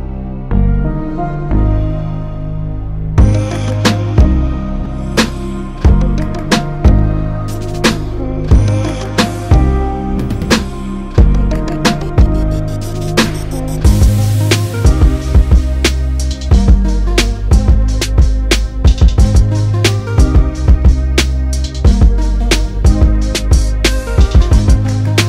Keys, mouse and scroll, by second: 22.4-25.2 drag.